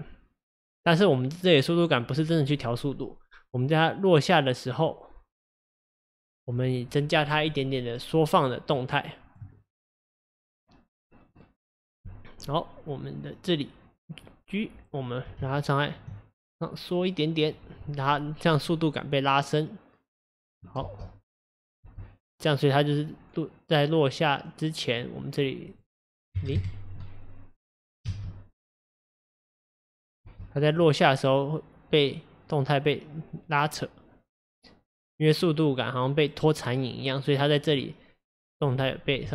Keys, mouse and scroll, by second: 8.8 click, 15.4 g, 18.7 click, 20.8 space, 21.9 space, 22.3-28.1 drag, 28.1 space, 29.2-29.8 scroll down 1, 30.3 space, 30.8 click, 39.2 g.